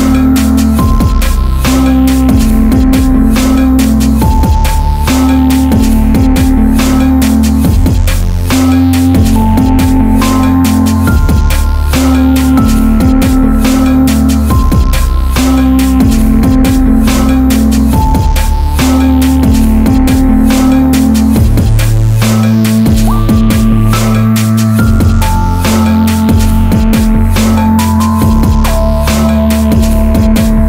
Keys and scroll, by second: 25.8 ctrl+j, 26.6 ctrl+t.